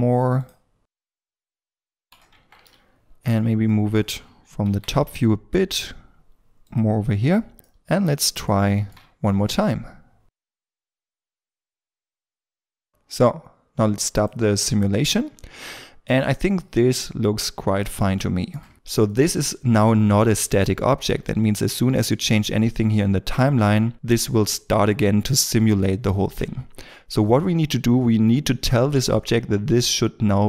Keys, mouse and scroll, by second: 0.9 g, 1.0 scroll down 1, 1.2 double click, 1.3 g, 1.6 middle click, 1.7 g, 1.9 scroll down 1, 2.0 shift+middle click, 2.3 Tab, 2.6 middle click, 5.5 g, 7.5 r, 7.6 middle click, 8.6 shift+middle click, 12.3 scroll up 1, 12.4 middle click, 12.5 scroll down 1, 12.6-13.5 scroll up 1, 15.0 middle click, 19.1 middle click.